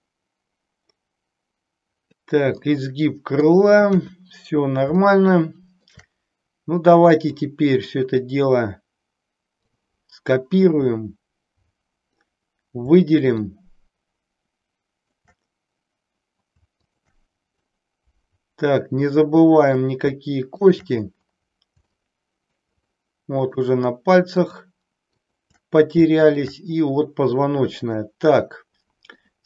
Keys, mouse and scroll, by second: 2.7 middle click, 3.9 KP_1, 4.9-5.9 shift+middle drag, 7.3 click, 9.8-12.3 drag, 13.4-15.1 shift+drag, 16.8 shift+click, 17.7-19.8 middle drag, 20.4 shift+click, 21.9 shift+middle click, 23.0 shift+middle click, 24.3 shift+click, 26.2 shift+click, 28.0-29.3 middle drag.